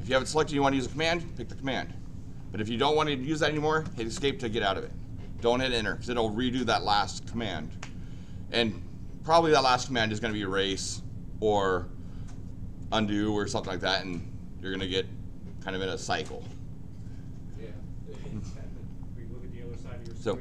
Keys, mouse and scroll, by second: 0.0 click, 0.6 click, 3.8 Escape, 20.3 click.